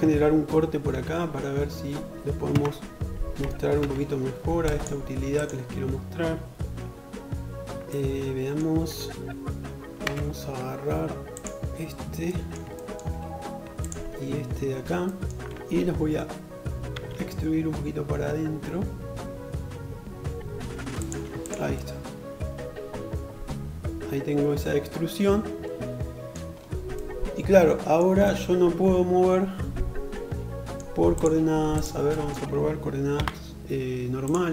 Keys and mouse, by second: 0.0 ctrl+r, 1.5 Tab, 2.8 ctrl+r, 9.1-11.4 middle drag, 9.1 3, 11.4 click, 11.7-20.4 shift+middle drag, 15.9 e, 20.4 click, 20.5-30.7 middle drag, 30.7 shift+click, 30.8-34.5 shift+middle drag.